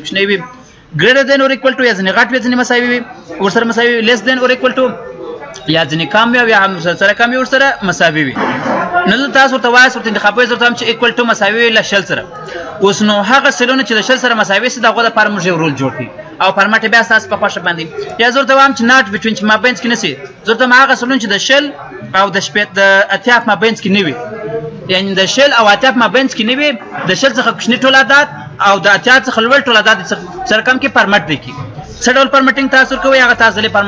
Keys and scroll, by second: 23.0 F9.